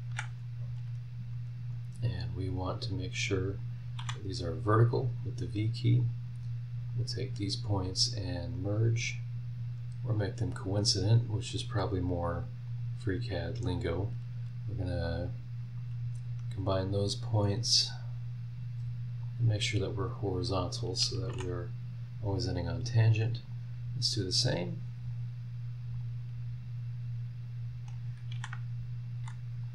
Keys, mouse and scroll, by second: 0.1 Escape, 0.5 scroll down 1, 1.7 click, 2.1 click, 3.6 click, 4.0 v, 6.0 click, 6.9 click, 8.2 click, 8.7 click, 10.1 click, 11.5 click, 12.2 click, 12.7 click, 13.6 click, 14.8 click, 19.2 click, 20.5 click, 21.3 h, 23.4 click, 25.0 click, 25.9 click, 27.9 click, 28.3 Escape, 29.2 Escape, 29.6 click.